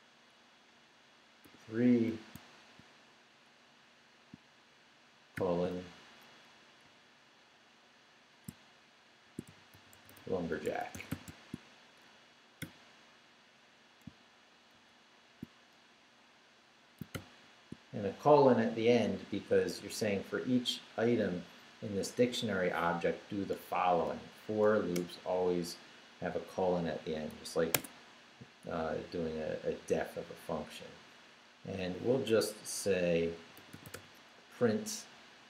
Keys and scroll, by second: 1.4 3, 2.3 shift+3, 5.3 shift+;, 6.8 ', 9.0-11.6 typing, 14.7 shift+], 17.1 shift+;, 25.0 Return, 27.7 Tab, 33.1-34.4 typing.